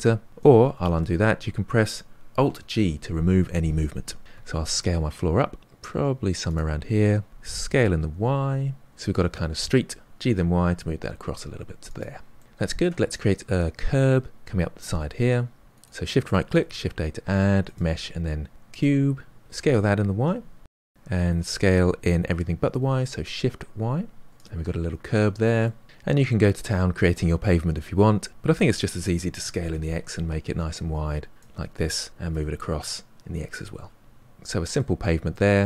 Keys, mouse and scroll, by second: 0.7 ctrl+z, 2.5 alt+g, 4.3 s, 7.2 s, 8.6-10.0 middle drag, 10.0 g, 12.3 middle click, 14.7-15.6 middle drag, 15.8 shift+Right, 16.6 shift+a, 19.4 s, 20.8 middle click, 21.4 s, 25.2 scroll up 1, 25.3-25.8 middle drag, 28.3 click, 29.3 s, 31.6 g, 33.0-35.6 middle drag.